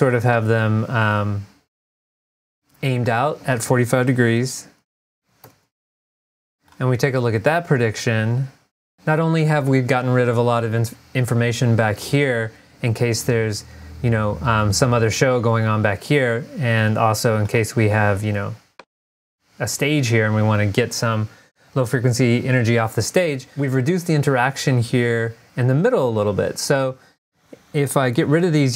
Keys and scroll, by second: 5.3 typing.